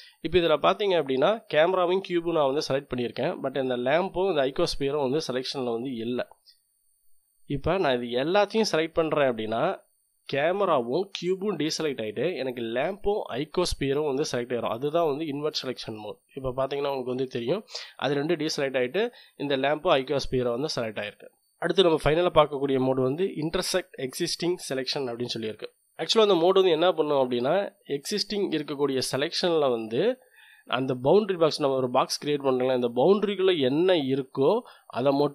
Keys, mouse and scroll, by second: 7.9-16.0 drag, 24.6-25.7 drag, 31.4-35.3 drag.